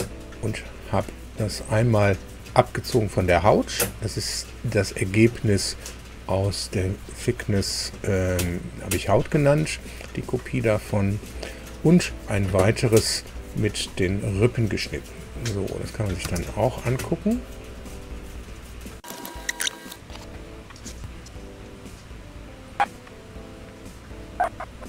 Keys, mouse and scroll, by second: 0.8 click, 1.5 click, 12.7 click, 13.4 scroll down 1, 15.6 click, 16.1 space, 17.8 click, 20.6 click, 20.9 alt+Tab.